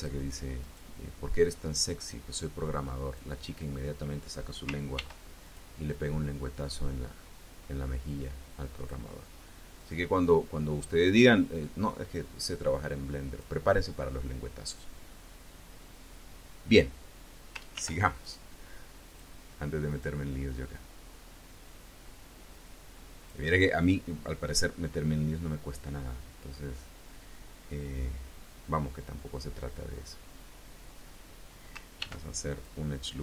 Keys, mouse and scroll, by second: 0.5 click, 1.3-3.2 drag, 4.8 ctrl+r, 5.3 ctrl+click, 8.6 click, 9.6 click, 10.3-13.5 drag, 17.6 ctrl+r, 18.1 ctrl+click, 18.9 click, 19.7 click, 20.6-23.3 drag, 24.9 scroll up 1, 25.1-25.6 scroll down 1, 26.5 scroll up 1, 27.1 scroll up 1, 27.8-28.2 scroll up 2, 31.9 ctrl+r, 32.3 ctrl+click.